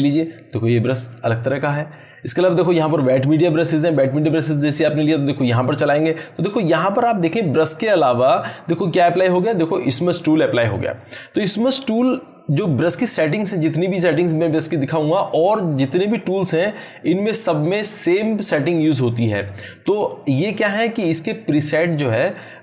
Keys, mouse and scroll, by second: 3.8-8.7 drag.